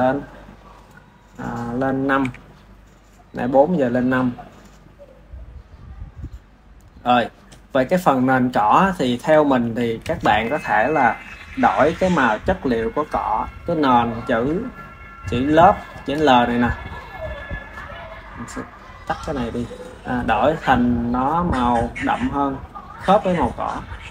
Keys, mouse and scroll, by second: 1.4 click, 7.8 click, 8.6-9.5 drag, 9.5 ctrl+s, 11.4 click, 13.5-15.6 drag, 15.6-16.9 shift+middle drag, 16.9 click, 18.6-19.7 drag, 19.7-20.1 ctrl+middle drag, 20.1 click, 21.4-22.4 middle drag, 22.4 click.